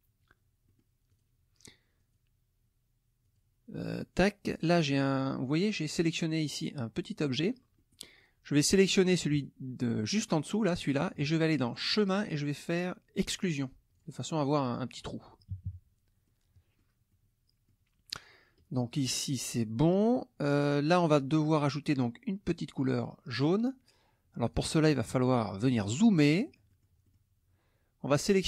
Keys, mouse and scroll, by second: 0.6 middle click, 1.1 click, 2.0 click, 3.2 click, 3.7 click, 4.7 middle click, 4.9 click, 7.8 click, 10.7 shift+click, 11.9 click, 13.3 click, 13.9 click, 15.5 KP_Subtract, 16.2 middle click, 16.2-17.0 scroll up 1, 17.1 middle click, 17.1-17.9 scroll up 1, 20.1 middle click, 20.1-20.9 scroll up 1, 21.5 click, 22.5 click, 24.5 click, 25.0 middle click, 25.2 click, 25.9 click, 26.1 middle click, 27.0-28.1 scroll up 1, 28.1 click.